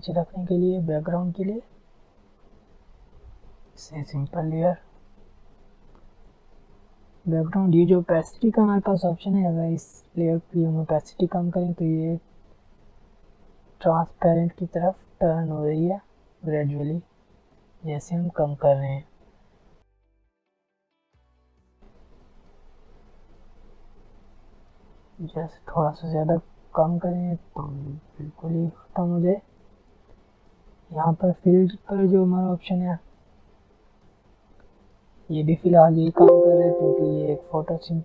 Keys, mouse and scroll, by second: 4.3 Return, 4.9 click, 8.8 click, 10.1 alt+scroll down 1, 10.7 alt+scroll up 1, 11.3 alt+scroll down 1, 12.3-21.8 drag, 16.9 click, 17.3-21.2 drag, 22.7-23.2 alt+scroll down 2, 23.2-24.2 alt+scroll up 2, 24.2-25.5 alt+scroll down 2, 25.5-35.1 drag, 35.1 alt+scroll down 1, 36.8 alt+click, 37.4 alt+scroll down 1.